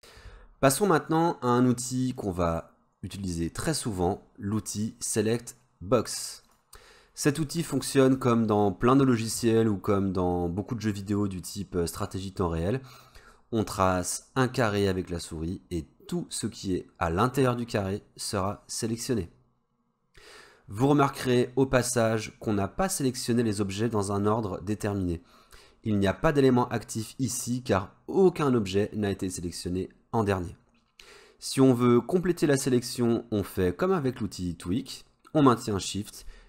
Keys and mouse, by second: 2.2-6.0 drag, 6.5 click, 7.3 middle click, 7.8-8.1 shift+middle drag, 8.3 middle click, 13.2-19.0 drag.